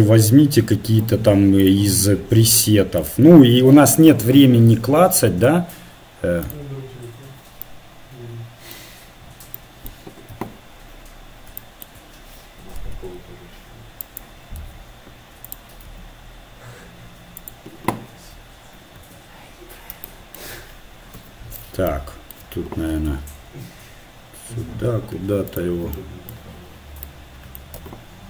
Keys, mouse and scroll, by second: 1.8-5.5 scroll up 1, 5.5-6.2 scroll up 1, 6.2 click, 10.4 KP_1, 14.2 g, 14.6 g, 15.9 s, 19.4 KP_7, 23.1 KP_7, 23.1 g, 26.1 KP_1, 28.0 KP_1.